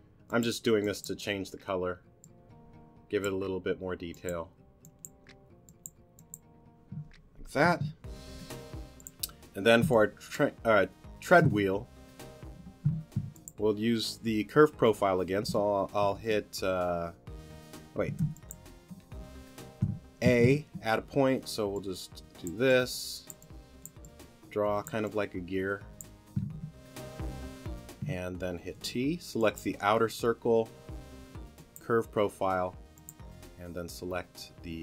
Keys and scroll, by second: 8.3 t, 9.8 space, 12.8 t, 16.0 space, 18.2 t, 20.2 a, 26.5 t, 28.7 t.